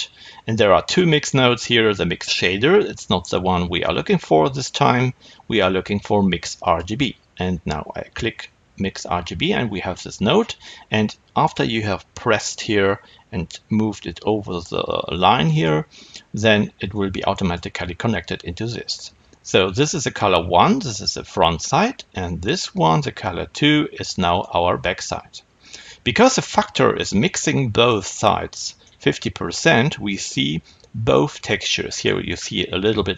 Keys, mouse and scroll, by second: 15.5-16.8 middle drag, 16.8 click, 22.6-28.7 drag, 28.7-33.1 middle drag, 31.8-33.1 scroll up 2.